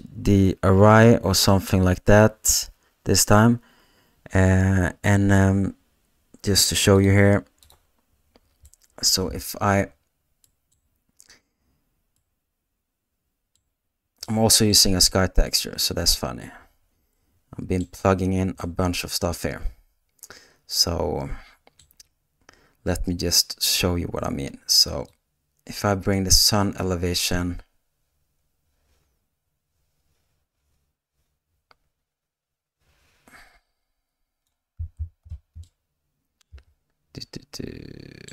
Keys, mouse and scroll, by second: 8.7 middle click, 15.5-17.2 middle drag, 17.3-18.7 middle drag, 18.8-22.1 middle drag, 31.4-35.6 drag, 35.8-38.3 middle drag.